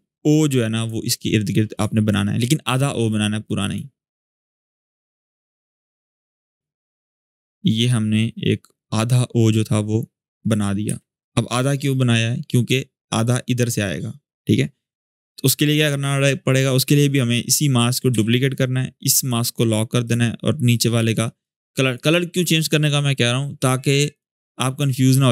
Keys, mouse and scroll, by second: 16.6 click, 17.9 ctrl+d, 19.0 click, 23.9-25.3 drag.